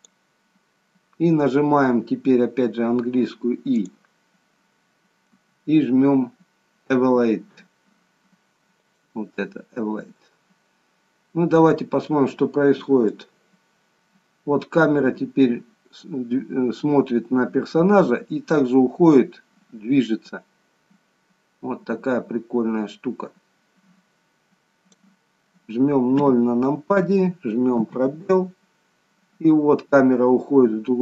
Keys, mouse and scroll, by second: 2.1-3.8 scroll down 1, 3.8 click, 3.8-4.6 scroll down 1, 10.3-10.9 scroll up 1, 11.3 scroll up 1, 11.6-12.2 scroll down 1, 13.2 click, 26.2 KP_0, 27.8 space.